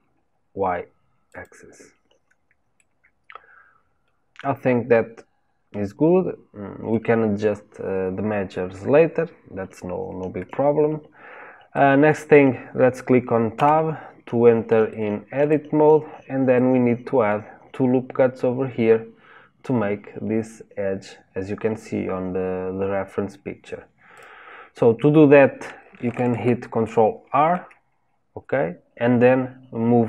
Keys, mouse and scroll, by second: 2.7-5.9 middle drag, 11.7-13.5 middle drag, 13.5 Tab, 14.8-16.0 shift+middle drag, 16.0-16.5 scroll up 1, 16.5-19.5 middle drag, 24.1-27.1 drag, 27.2 ctrl+r.